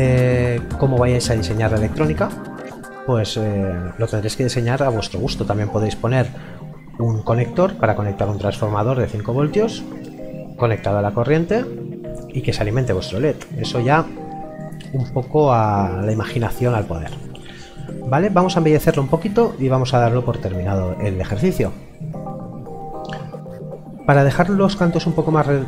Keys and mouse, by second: 14.6 middle click.